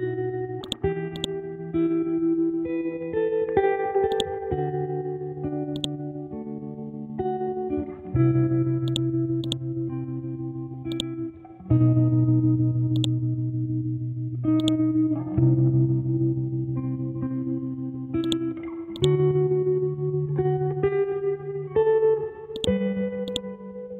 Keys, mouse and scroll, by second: 0.6 ctrl+click, 2.0-2.6 scroll down 1, 2.8 ctrl+z, 4.1-8.9 drag, 9.8-10.4 scroll down 1, 10.9 click, 11.5 scroll up 1, 12.9-17.3 drag, 17.3-18.2 scroll down 1, 18.2-22.5 drag, 23.3 right click.